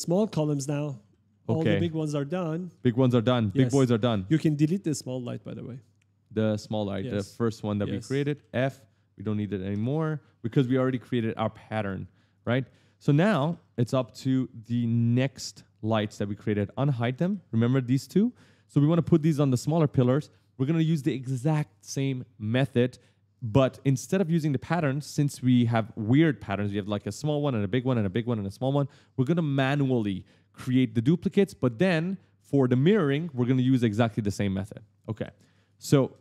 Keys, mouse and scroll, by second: 0.3 right click, 0.6-3.1 typing, 3.8 click, 4.3 click, 6.4 click, 7.5 right click, 8.6 right click, 9.5 Delete, 10.9 click, 11.6 click, 12.2 click, 12.5 right click, 12.9-14.0 typing, 14.8 click, 16.0 click, 16.4-18.2 typing, 16.6 right click, 34.8 right click.